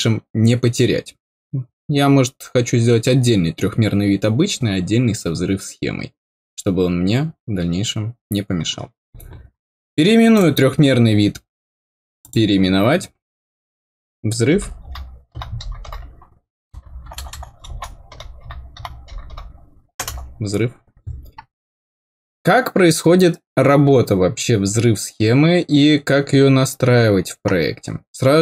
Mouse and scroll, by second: 10.2 right click, 12.1 click.